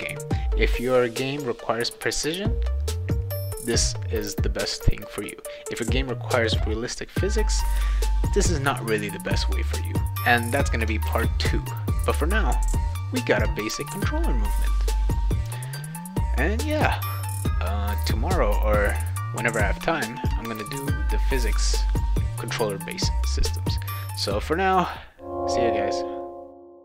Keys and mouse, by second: 11.0 ctrl+s.